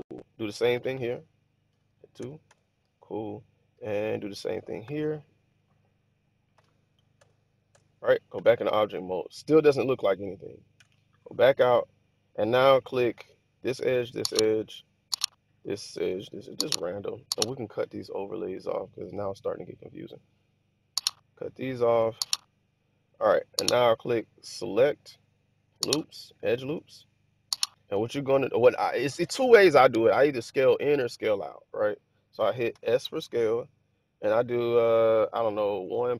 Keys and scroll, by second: 0.6 ctrl+r, 1.5 2, 2.1 Return, 2.3 Return, 4.7 ctrl+r, 6.4 2, 7.0 Return, 7.5 Return, 8.2 Tab, 10.6 Tab, 32.6 s, 35.7 1, 36.0 ..